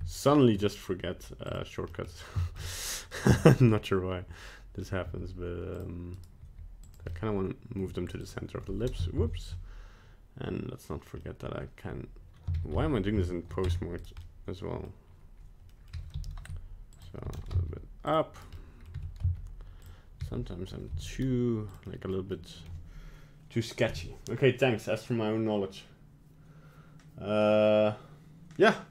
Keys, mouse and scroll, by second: 1.5 click, 1.9 middle click, 2.4 shift+middle click, 3.1 right click, 3.4 middle click, 5.1 g, 6.2 right click, 6.4 g, 7.1 middle click, 7.9 g, 9.3 ctrl+z, 11.2 middle click, 12.6 ctrl+z, 12.8 ctrl+z, 13.3 ctrl+z, 13.7 Tab, 14.0 right click, 14.2 middle click, 15.7 middle click, 15.9 g, 17.2 g, 18.4 right click, 18.6 middle click, 18.9 g, 20.2 g, 21.9 middle click, 22.3 middle click.